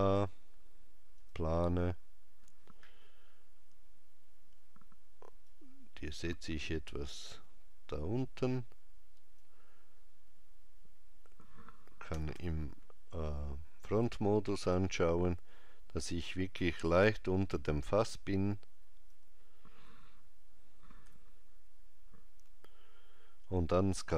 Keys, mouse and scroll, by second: 5.5 click, 12.2 KP_1, 12.4 KP_5, 16.2 click, 21.1 KP_5.